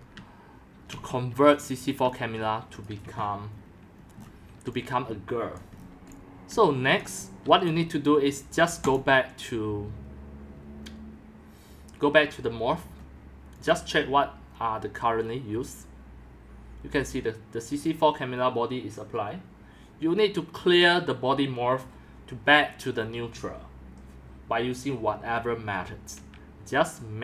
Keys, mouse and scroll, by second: 0.0-2.8 typing, 1.1 click, 1.7 click, 3.2-5.6 shift+middle drag, 4.6-7.5 typing, 5.6 click, 7.4-9.1 drag, 9.4-11.6 drag, 12.7 scroll, 13.7-18.7 drag.